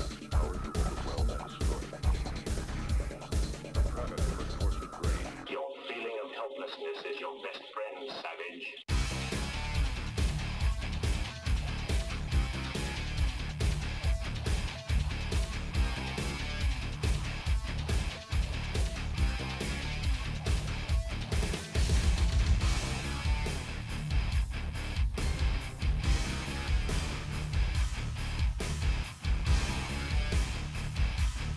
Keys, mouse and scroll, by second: 0.0-6.1 typing, 0.1 shift+click, 1.1 shift+click, 1.4 shift+click, 1.8 shift+click, 2.3 click, 2.9 shift+click, 3.3 shift+click, 3.7 shift+click, 4.1 shift+click, 4.5 shift+click, 4.9 shift+click, 5.4 middle click, 5.7 click, 6.6 click, 6.7 scroll up 1, 6.8 shift+middle click, 7.2 click, 7.9 click, 10.0 click, 11.0 g, 12.4 click, 12.7 g, 16.1 click, 16.9 g, 17.4 click, 18.3 g, 19.3 click, 19.5 g, 20.5 middle click, 20.9-21.2 scroll down 4, 21.2 middle click, 21.9 scroll down 2, 22.2 middle click, 22.8 click, 24.0 3, 24.1-25.8 drag, 27.2 ctrl+r, 29.8 3, 30.0 shift+click, 30.9 ctrl+z.